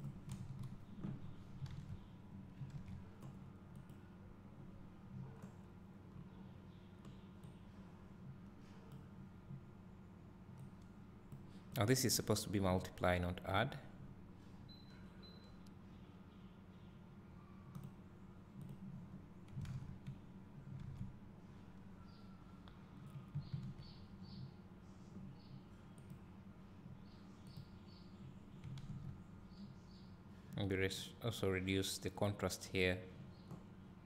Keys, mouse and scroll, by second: 0.5 click, 0.5 KP_0, 1.3 scroll up 2, 1.9 alt+a, 2.7-3.1 scroll down 1, 3.1 s, 4.0 click, 7.7-11.0 drag, 13.0-18.0 drag, 14.6 scroll up 1, 20.8 scroll down 1, 21.1 s, 21.6 scroll down 1, 24.7 scroll up 1, 26.3-28.4 drag.